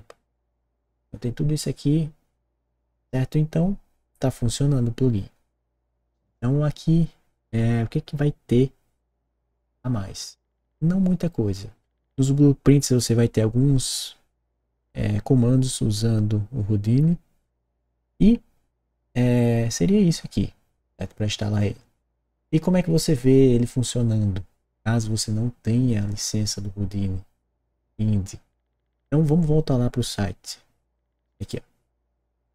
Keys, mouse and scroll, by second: 6.1 click, 31.4 click.